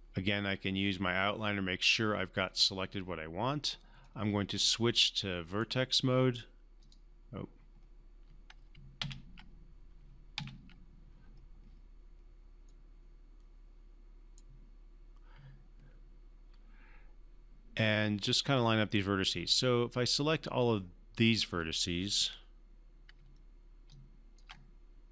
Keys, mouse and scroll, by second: 1.9 click, 4.0-5.9 right drag, 6.8 click, 9.0 ctrl+z, 10.3 ctrl+z, 12.6 right click, 12.8-14.5 right drag, 20.6-21.5 drag, 23.9-24.5 ctrl+drag.